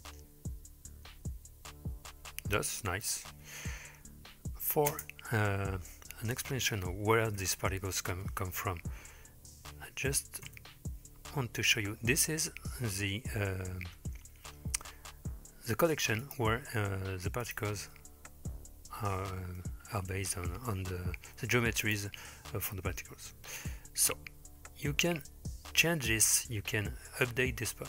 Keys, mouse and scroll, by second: 5.0 space, 16.3 click, 17.4 click, 18.6-19.6 scroll down 3, 19.6-20.3 middle drag, 21.2 g, 22.2-25.9 middle drag, 27.3-27.8 middle drag.